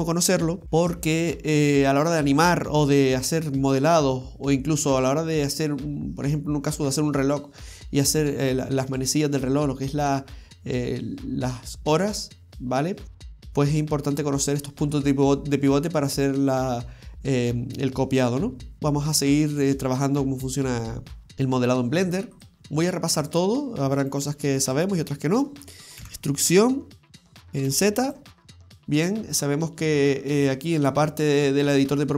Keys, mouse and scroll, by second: 0.6-1.1 ctrl+z, 18.8 middle click, 18.8-19.1 scroll down 1, 19.6 click, 19.9-20.6 scroll up 3, 20.6-21.1 scroll down 1, 21.1 scroll down 1, 21.3 right click, 22.4 click, 24.1 right click, 24.7 alt+shift+right click, 26.1 e, 28.4 scroll down 2, 28.6 scroll up 1, 28.6 middle click, 29.3-29.8 scroll up 3.